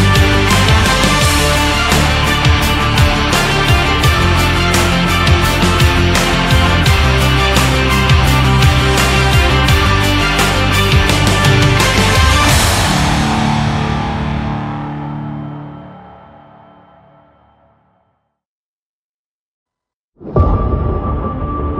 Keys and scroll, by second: 8.6 space, 12.1 ctrl+0, 12.4 ctrl+-.